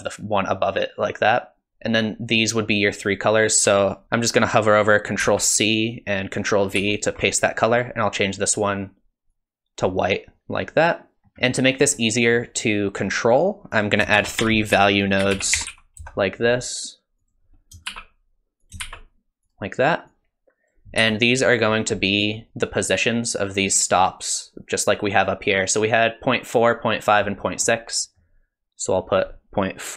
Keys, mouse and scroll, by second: 5.9 ctrl+c, 6.8 ctrl+v, 7.7 click, 11.3 scroll down 2, 11.6 scroll up 1, 12.0 middle click, 13.7 click, 14.2 shift+a, 17.9 shift+d, 18.8 shift+d, 20.1 click, 21.0 g, 22.4 middle click, 27.4 middle click, 28.0 middle click, 28.9 click.